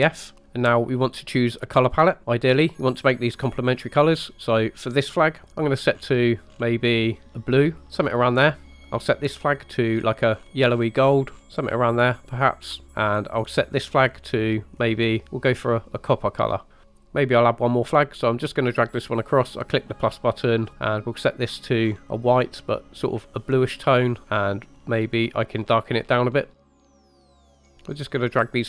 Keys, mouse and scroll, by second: 4.3 click, 4.3 scroll down 4, 4.8 click, 5.8 click, 8.9 click, 9.7 click, 13.8 click, 14.6 click, 17.0-19.0 drag, 19.5 click, 21.1 click, 26.9-27.4 drag, 27.7-28.6 drag.